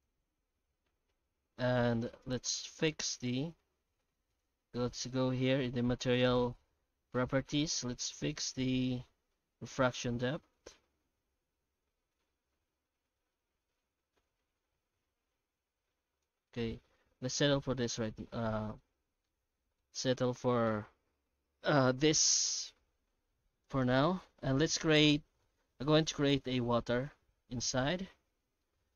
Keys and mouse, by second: 1.1 alt+middle click, 2.1 ctrl+space, 2.5 shift+middle drag, 4.4 click, 9.7-16.2 shift+drag, 16.5-18.2 middle drag, 18.6 shift+middle click, 19.2-19.8 alt+middle drag, 19.9 alt+a, 23.6 right click, 24.1 Tab, 25.9 middle click, 27.2 Tab, 28.1 shift+h, 28.6 middle click.